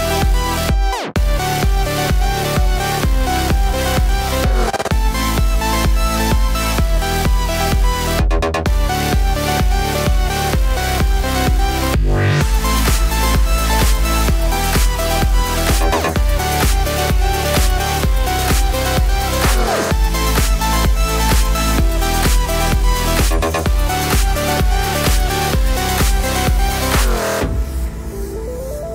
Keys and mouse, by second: 0.0-3.0 shift+middle drag, 3.0-4.4 shift+drag, 4.4-9.5 middle drag, 4.8 alt+z, 5.1 e, 9.5-13.5 drag, 14.3-15.6 alt+middle drag, 15.6-17.5 drag, 16.3 s, 17.5-28.9 middle drag, 22.6 shift+click, 24.5 shift+click, 25.6 shift+click, 26.0 shift+click, 27.0 shift+click, 27.2 alt+z, 27.4 alt+z, 27.5 s.